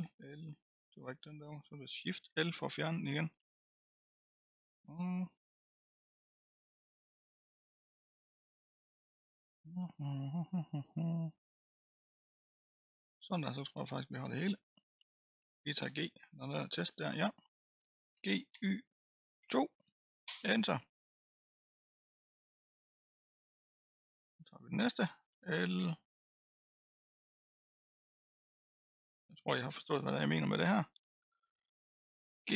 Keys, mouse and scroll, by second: 0.0 l, 1.1 l, 2.2 shift+l, 3.4-5.9 middle drag, 5.9 l, 6.5-7.7 middle drag, 7.7 l, 8.1-12.5 middle drag, 12.5 l, 13.1-15.3 middle drag, 15.3-15.9 scroll down 1, 15.9 g, 18.1 g, 20.4 Return, 21.3-22.6 scroll down 8, 22.6 click, 23.1-23.5 scroll up 6, 24.1-25.3 scroll up 2, 25.3 l, 26.3 l, 28.5 l, 29.0-31.0 middle drag, 31.0 l, 32.4 g.